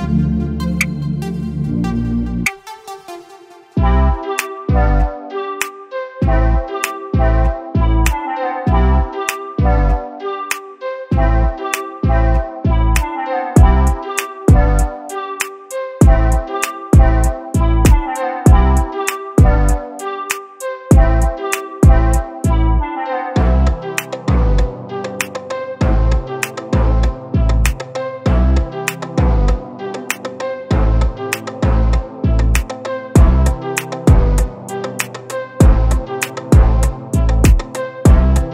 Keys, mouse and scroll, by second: 4.2 click, 5.6 click, 6.6 click, 6.9-7.2 scroll up 2, 7.2 click, 7.5-9.9 right drag, 9.9 ctrl+z, 10.5 click, 10.8 click, 11.3 click, 12.4 click, 14.9 click, 16.1 click, 17.6-19.6 drag, 19.6 click, 27.4 click, 29.0 scroll up 2, 29.5 click, 30.2-30.9 drag, 30.9-31.3 scroll down 1, 31.3 click, 31.6 click, 32.3 click, 33.0 drag, 33.7-35.1 right drag, 35.1 click, 35.6 drag, 36.0-37.3 right drag, 37.3 click.